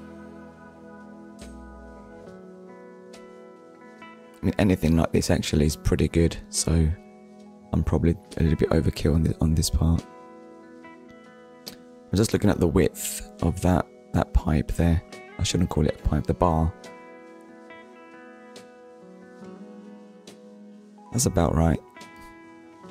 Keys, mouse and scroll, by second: 3.5 shift+click, 15.2 click, 16.5 middle click, 17.9 shift+middle click.